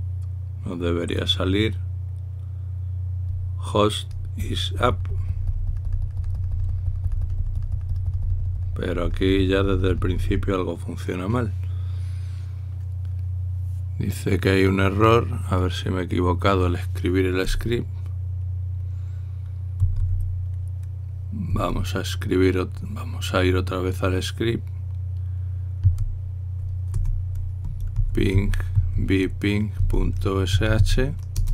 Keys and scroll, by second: 20.6 v, 26.6 s, 28.1-31.5 typing.